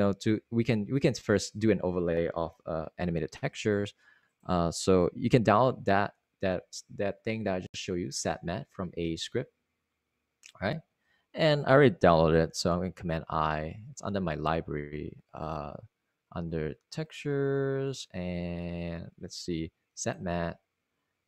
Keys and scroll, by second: 1.4 super+Tab, 2.5 super+Tab, 5.5 super+Right, 7.5 super+Tab, 13.2 super+Tab, 14.4 super+i.